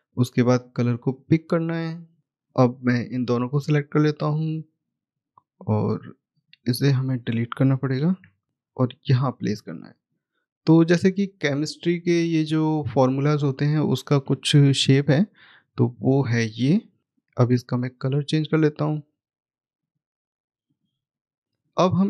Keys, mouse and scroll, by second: 0.4 click, 2.2 middle click, 2.3 click, 5.7 right click, 6.2 click, 7.9 Delete, 8.5 click, 14.6 ctrl+Page_Down, 16.9 click.